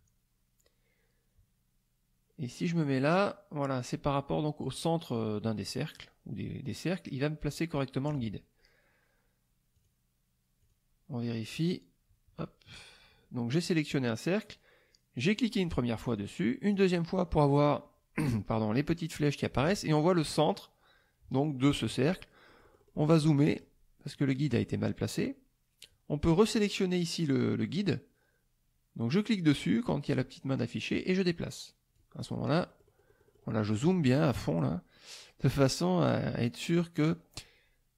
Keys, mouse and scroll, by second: 9.8 click, 10.6 click, 15.3 click, 16.0 click, 16.7 click, 22.5 middle click, 23.3 click, 24.1 click, 25.1 click, 29.1-33.5 drag, 32.1-33.5 right drag.